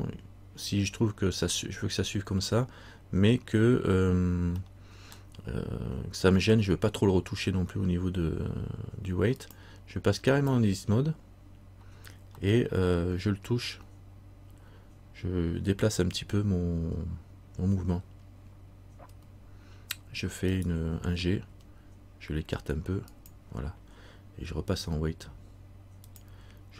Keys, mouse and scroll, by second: 0.8 scroll up 2, 4.8 middle click, 9.5 click, 12.6 middle click, 19.2 r, 21.6 g, 26.2 click.